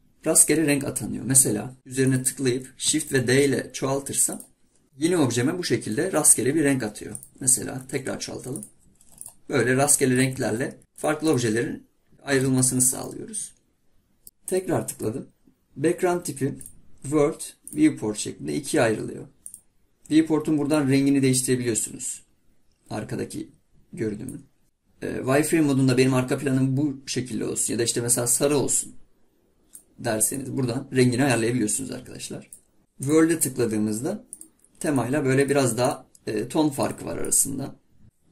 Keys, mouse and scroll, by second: 2.1 click, 3.2 shift+d, 7.2 click, 7.8 shift+d, 9.3 click, 10.2 click, 10.4 shift+d, 11.4 click, 12.6-14.2 shift+middle drag, 14.5-17.6 drag.